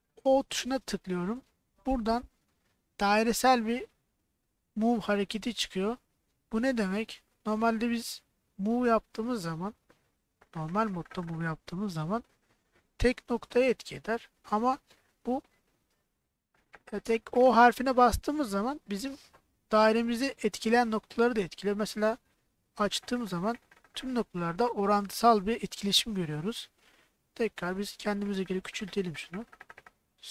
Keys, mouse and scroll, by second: 0.4 o, 5.5 g, 12.4 y.